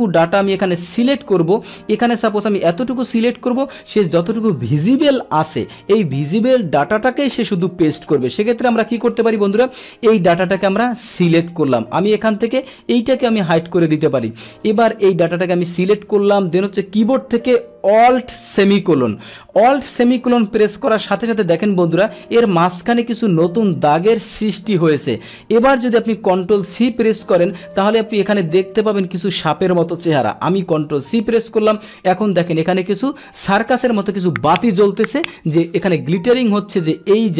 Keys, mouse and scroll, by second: 0.4 Escape, 0.9 click, 1.0 Escape, 1.6-3.1 drag, 10.4-11.4 drag, 12.1 click, 12.6 right click, 13.1 right click, 13.5 click, 13.9 click, 14.6-15.9 drag, 31.1 ctrl+c.